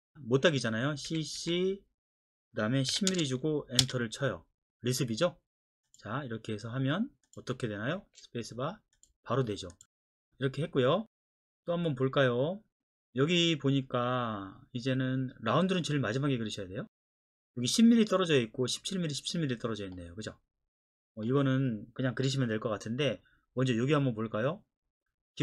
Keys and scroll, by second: 1.1-1.4 typing, 2.9 KP_1, 3.1 KP_0, 3.8 Return, 8.0 space.